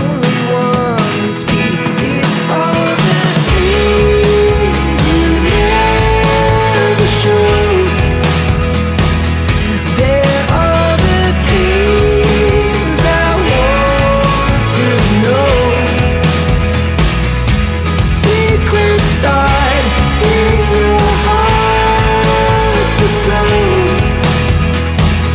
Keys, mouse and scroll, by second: 1.0 3, 1.3 0, 2.7 click, 5.3 click, 7.1 click, 8.8 click, 10.6 click, 11.2-12.0 scroll down 1, 13.3 click, 15.0 click, 18.9 click, 20.6 click, 22.2 click, 23.8 click.